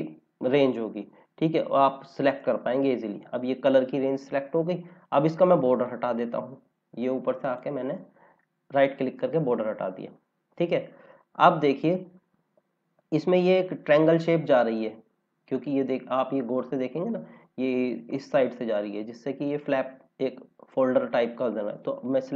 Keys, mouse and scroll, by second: 2.2 click, 4.4-4.8 scroll up 1, 7.3 right click, 9.3 scroll down 1, 11.2 scroll down 1, 12.2-13.9 scroll up 1, 15.4-15.7 scroll up 1, 17.0-18.4 scroll down 1, 18.7 scroll down 1.